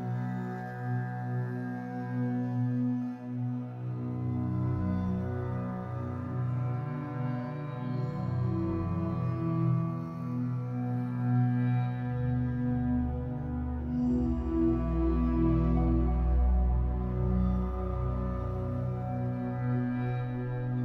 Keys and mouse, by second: 1.0-2.9 shift+drag, 3.4 ctrl+alt+click, 4.8 alt+shift+click, 5.6 click, 6.6 click, 6.9 click, 7.5 click, 8.4 0, 8.6 Return, 9.4 click, 10.9 ., 11.3 1, 11.6 Return, 12.3 click, 13.7 click, 15.4 ctrl+s, 16.0 ctrl+alt+click, 16.5-17.7 alt+drag, 18.6 Tab, 19.2-20.5 ctrl+alt+drag, 20.5 7.